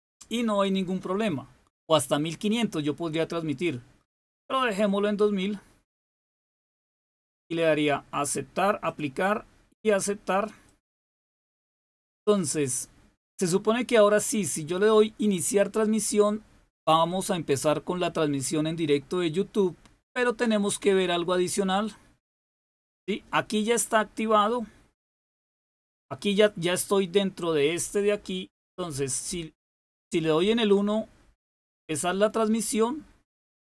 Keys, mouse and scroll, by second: 8.8 click, 10.6 click, 21.4 click.